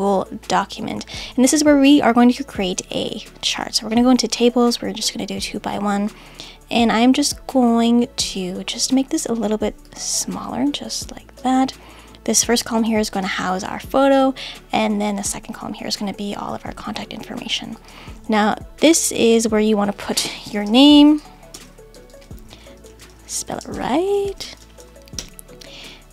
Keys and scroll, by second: 20.2-21.0 typing, 24.3 shift+n.